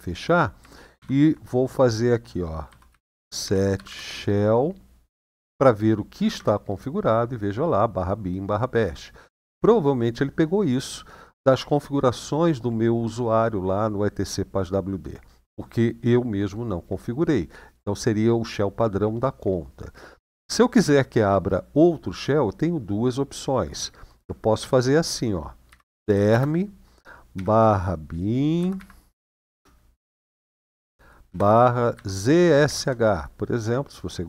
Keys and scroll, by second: 0.7 typing, 2.4-3.6 typing, 3.9 Tab, 6.1 Return, 24.4 typing, 25.4-26.0 typing, 27.1 typing, 28.3-32.5 typing.